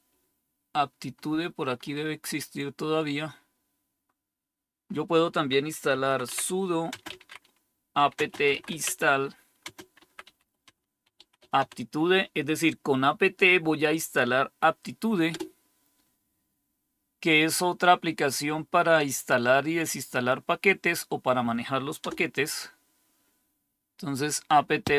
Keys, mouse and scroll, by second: 2.1-2.7 scroll up 1, 2.7-3.5 scroll up 1, 3.5-4.8 scroll up 1, 4.8-5.8 scroll up 1, 5.6-12.0 typing, 5.8-6.2 scroll down 1, 15.2 Return, 21.9 Return.